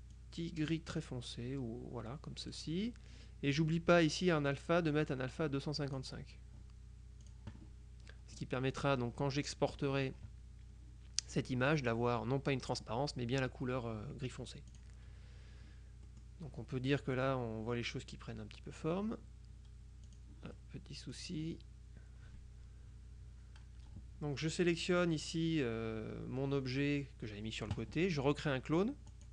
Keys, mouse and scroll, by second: 0.2-3.1 drag, 5.1-6.5 drag, 7.3 click, 14.8 click, 16.2 click, 16.7 middle click, 20.2 click, 20.6 middle click, 24.6 click, 29.2 click.